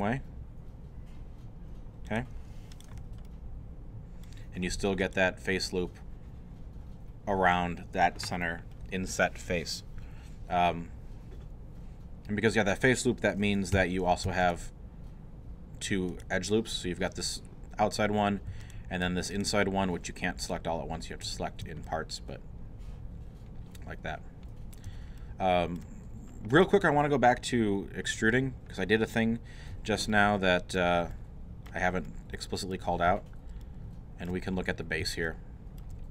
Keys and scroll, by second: 13.8 2, 14.3 alt+2.